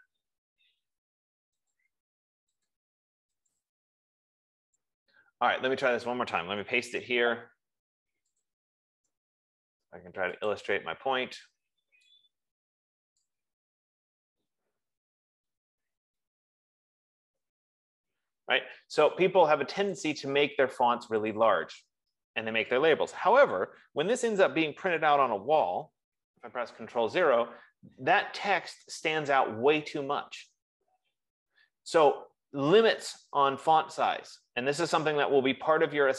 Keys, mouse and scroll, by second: 2.0 click, 3.4 click, 8.7 click, 9.5-11.0 drag, 13.7 click, 15.0-18.9 typing, 20.7 click, 21.7 click, 26.5 ctrl+0.